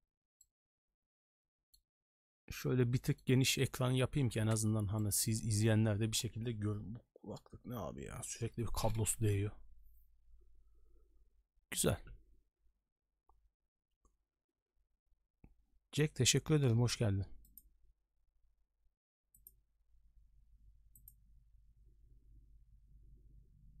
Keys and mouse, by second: 0.4-1.7 middle drag, 2.6 middle click, 4.5 ctrl+space, 5.0 middle click.